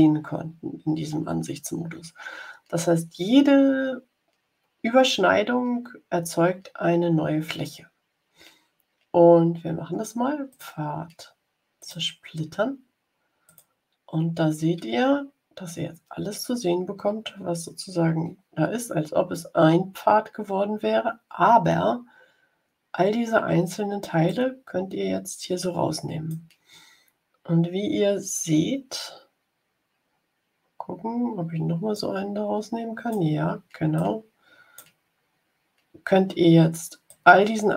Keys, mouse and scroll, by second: 10.4 click, 11.7 click, 13.4 click, 24.2-26.4 drag, 31.8-33.2 drag, 33.9 click, 37.0 click.